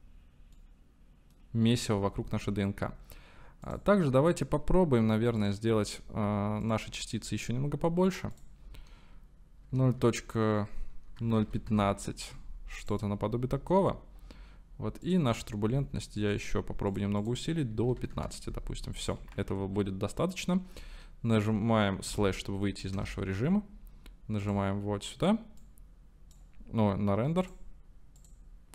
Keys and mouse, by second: 0.5-1.8 middle drag, 3.7 click, 6.6 click, 8.3-12.4 drag, 12.9 click, 15.1 click, 16.4 drag, 17.5-18.6 drag, 19.9 ctrl+s, 22.1 KP_Divide, 22.9 KP_0, 24.5 click, 25.7 click, 26.0 middle click, 27.4 middle click, 28.2 middle click.